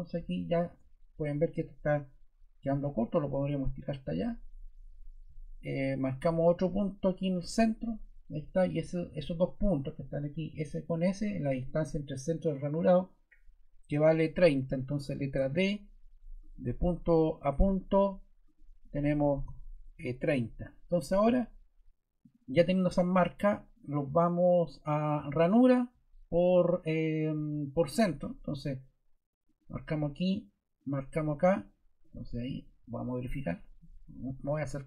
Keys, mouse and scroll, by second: 15.3 d, 18.9-19.9 typing.